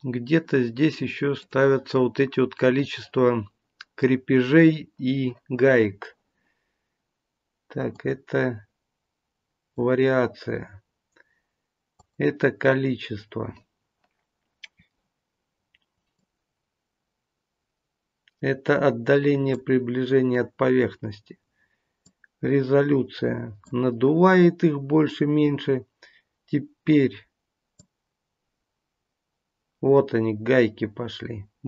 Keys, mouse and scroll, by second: 1.5 click, 7.9 click, 11.9 click, 16.1 click, 22.0 click, 27.7 click.